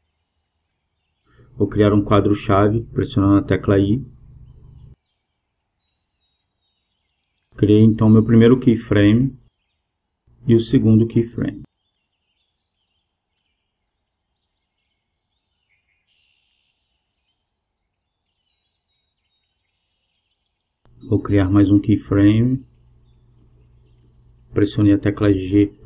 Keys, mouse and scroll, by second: 0.9 alt+g, 2.5-4.4 drag, 5.2 i, 9.0-10.8 drag, 11.3 g, 16.0-17.8 drag, 23.1 alt+g, 25.3-25.8 drag.